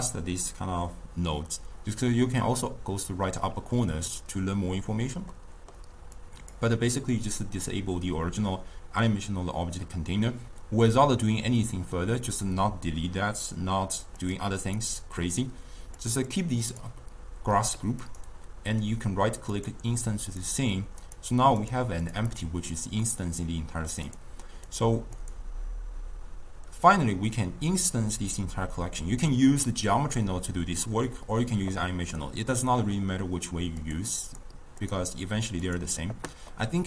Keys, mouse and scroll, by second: 5.4-6.2 middle drag, 6.2-9.2 drag, 14.2 click, 14.7 click, 16.0 click, 16.3 click, 16.7 drag, 18.1-20.4 right drag, 20.4 click, 21.1 click, 21.6 click, 22.1 click, 22.4 click, 23.1-24.1 middle drag, 24.1 drag, 24.7 click, 25.2 click, 32.2-33.9 middle drag, 33.9 click, 34.3 click, 34.9 click, 35.7 click, 36.6-36.8 middle drag.